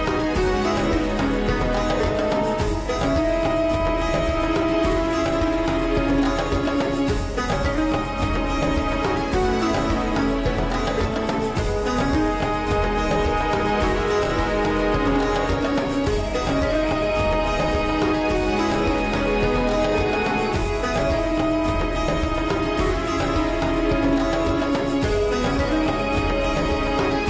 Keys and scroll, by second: 3.9 ctrl+v.